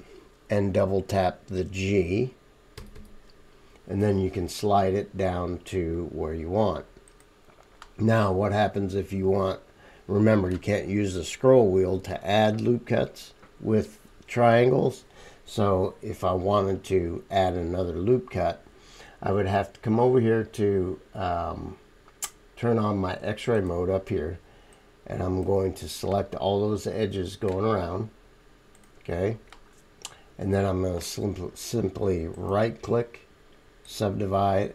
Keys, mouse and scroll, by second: 2.7 g, 8.2 middle click, 8.2-23.5 right drag, 8.4-23.7 middle drag, 24.9-28.9 middle drag.